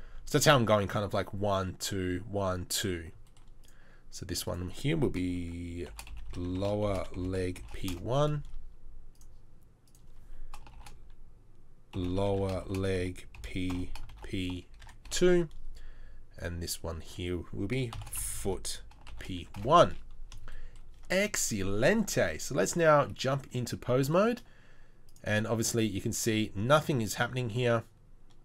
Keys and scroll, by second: 18.3 o, 25.5 r.